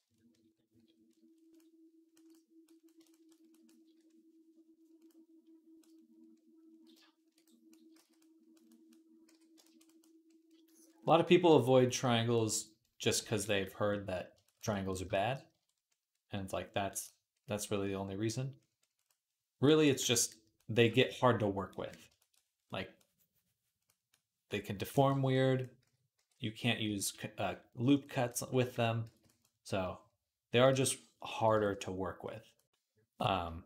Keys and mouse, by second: 0.7 ctrl+r, 3.7 d, 5.0-7.8 drag, 7.8 ctrl+z, 9.1 j, 15.4-19.8 middle drag, 19.7 click, 19.7 right click, 20.4-21.9 shift+drag, 20.4-21.5 shift+middle drag, 20.4-21.5 shift+right drag, 23.8 click, 23.8 middle click, 23.8 right click, 25.3-29.2 drag, 25.3-26.7 middle drag, 25.3-26.7 right drag, 26.0 d, 26.8 ctrl+z, 28.9 ctrl+z, 30.6 ctrl+z, 31.4 ctrl+z, 32.6 middle click, 32.8 click.